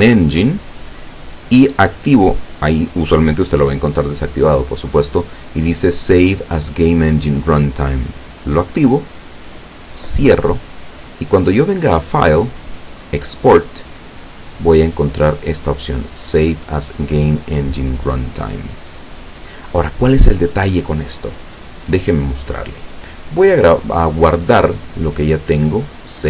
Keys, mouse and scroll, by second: 2.2 click, 8.3 click, 9.8 click, 11.8 click, 18.9 click, 23.6 click.